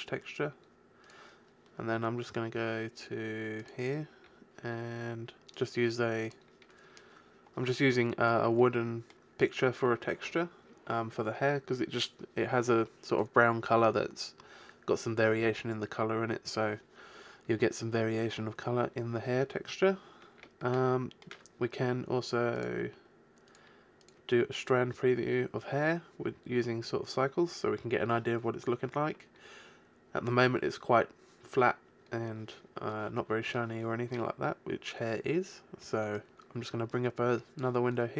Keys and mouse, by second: 2.6-5.9 middle drag, 16.7-22.9 middle drag, 34.9 middle click, 35.0-37.2 drag, 37.2 middle click, 37.5 click.